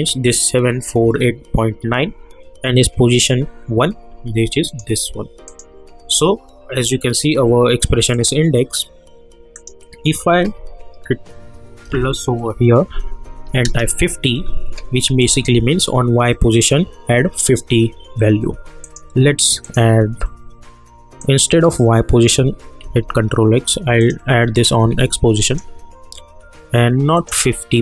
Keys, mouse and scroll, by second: 4.6 click, 8.1 click, 11.8 shift+=, 14.4-15.2 scroll down 1, 15.2 click, 18.8-22.8 drag, 22.8 ctrl+x, 24.0 click, 24.9 ctrl+v, 25.4 click.